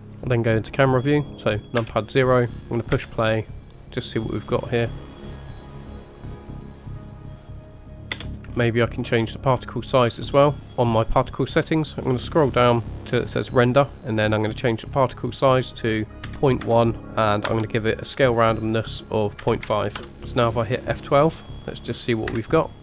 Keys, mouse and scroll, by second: 1.8 KP_0, 2.9 space, 8.2 space, 8.6-9.6 scroll up 6, 9.6-10.6 scroll down 4, 11.5-12.6 scroll down 2, 12.6-14.6 scroll down 5, 14.6-20.1 drag.